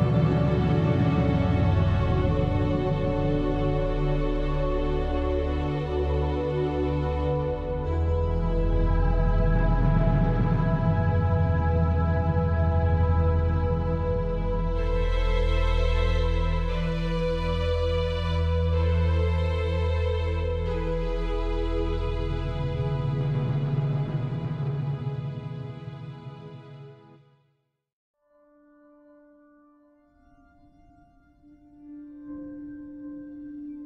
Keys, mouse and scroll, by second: 0.8 scroll down 1, 1.2 middle click, 1.8 shift+middle click, 1.9 scroll up 6, 2.5 scroll down 4, 3.6 Tab, 4.0 click, 4.6 ctrl+l, 5.1 ctrl+l, 5.5 ctrl+l, 6.0 a, 6.5 scroll down 3, 6.8 middle click, 7.3 scroll down 2, 7.6 middle click, 8.1 scroll up 3, 8.6 shift+middle click, 9.5 Tab, 11.9 Tab, 13.5 shift+a, 17.6 click, 18.4 click, 21.3 click, 23.3 click, 25.0 g, 27.9 g, 29.0 click, 29.1 middle click, 30.0 scroll down 1, 30.3 shift+middle click, 30.9 shift+middle click, 31.1 middle click.